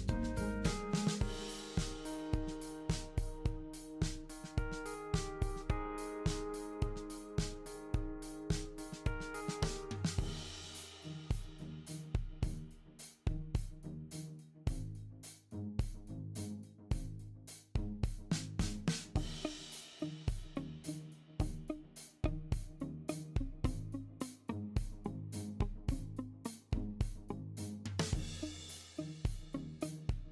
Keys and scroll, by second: 19.0 super+c, 19.1 super+v.